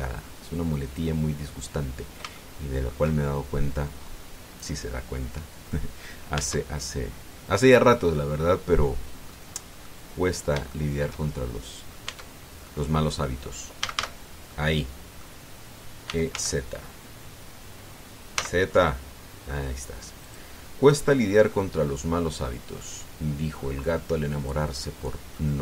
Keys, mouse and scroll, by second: 2.1-2.4 scroll down 1, 2.7 scroll down 1, 3.2 shift+click, 4.1-4.5 shift+scroll down 1, 4.8-5.1 scroll up 1, 7.2 Tab, 7.7-8.0 scroll down 2, 8.9-10.2 drag, 10.6-12.9 drag, 12.8 Tab, 13.4 click, 14.6 a, 15.3 click, 16.8 e, 17.1 z, 19.1 z, 21.0 click, 22.6-22.9 scroll up 1, 23.2 scroll down 1, 23.6 click, 25.5-25.6 scroll down 2.